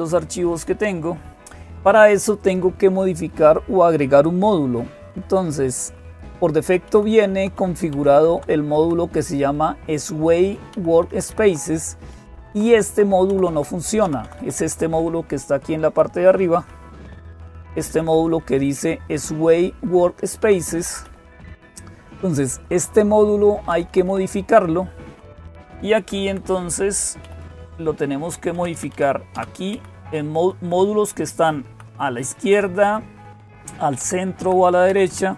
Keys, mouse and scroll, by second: 0.0-35.3 typing, 2.2 click, 5.4 Right, 6.0 Right, 6.1-6.5 Right, 6.7 Right, 6.7 Right, 6.9 Right, 7.8 Down, 7.9 Down, 8.1 Down, 8.6 Left, 10.6 Right, 10.7 Right, 10.9 Right, 11.1 Right, 11.3 Right, 12.0 Left, 12.1 Left, 12.3 Left, 12.5 Left, 12.7 Left, 13.1 Right, 13.3 Right, 13.8 Down, 14.0 Down, 14.2 Down, 14.4 Down, 14.6-15.7 Down, 16.5 Up, 17.2-17.5 Up, 17.7 Up, 17.8 Up, 18.0 Up, 18.6 Left, 19.3-19.7 Left, 20.2 Down, 20.4 Down, 20.6 Down, 20.9 Up, 21.0-22.0 Up, 22.2 Up, 22.3 Up, 22.7 Up, 23.0 Up, 23.5 Down, 23.9 Down, 25.8 Down, 26.0 Down, 27.0 Up, 27.2 Up, 28.4 Down, 28.6 Down, 28.7 Down, 29.2 Down, 32.2 Left.